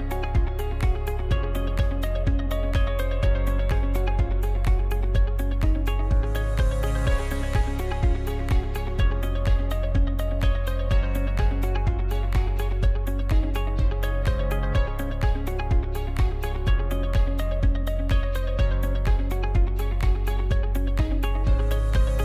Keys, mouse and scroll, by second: 4.5 KP_7, 6.9 s, 12.8 ctrl+z.